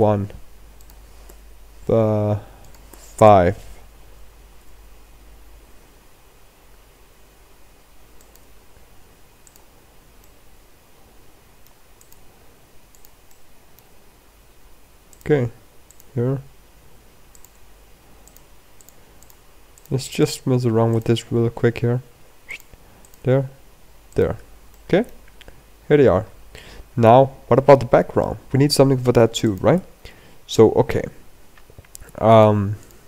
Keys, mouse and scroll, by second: 32.2 click, 32.7 click, 32.9 middle click.